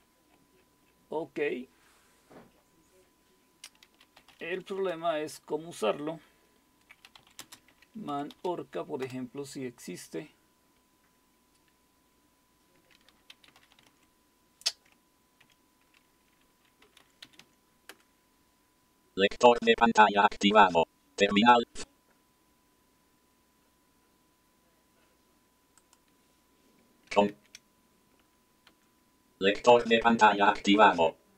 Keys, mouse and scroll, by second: 0.0-3.8 scroll down 5, 3.8-5.0 typing, 6.8-9.0 typing, 13.1-14.4 typing, 15.4 typing, 16.6-17.9 typing, 23.2-25.1 scroll up 2, 25.8 click, 27.3 ctrl+c, 28.2 Up, 28.7 Return.